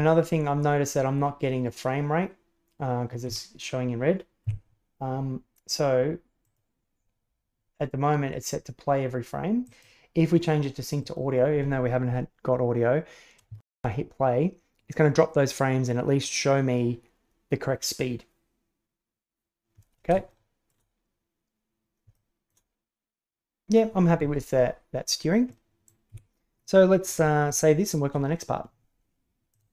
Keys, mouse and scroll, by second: 3.3 Escape, 4.4 a, 6.4-11.2 drag, 11.3 click, 13.5 shift+space, 20.2-20.6 shift+middle drag, 22.1 shift+middle click, 25.5-25.9 middle drag, 26.1 Escape, 26.5-27.0 middle drag, 27.4-27.7 shift+middle drag.